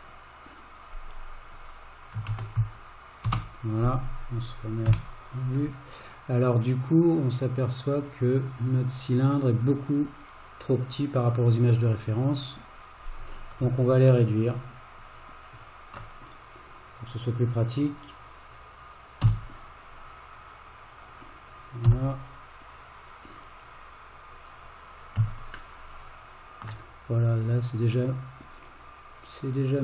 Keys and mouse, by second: 4.7 click, 4.9 KP_1, 12.5 click, 14.5 shift+click, 15.0 shift+drag, 19.3 s, 21.9 g, 25.9-26.7 shift+middle drag.